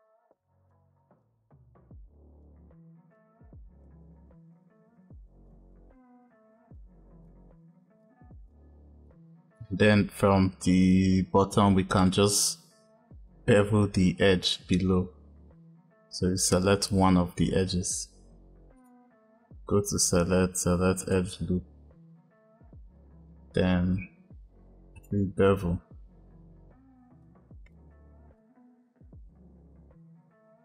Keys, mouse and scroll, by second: 1.1 click, 1.9 shift+click, 3.1 click, 3.8 e, 5.9 click, 7.2 click, 7.9 click, 11.8 click, 14.0-17.1 drag, 18.6-21.7 drag, 24.8-27.2 drag, 28.3 click.